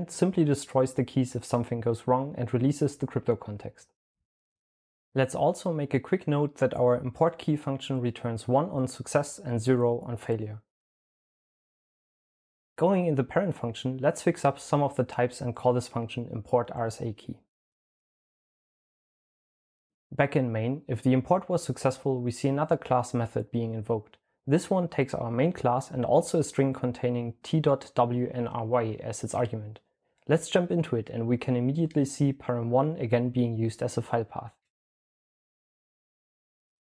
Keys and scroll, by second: 7.5 super+l, 7.6-11.8 typing, 13.8-14.6 typing, 17.3 super+l, 17.5-19.7 typing, 36.3-36.8 typing.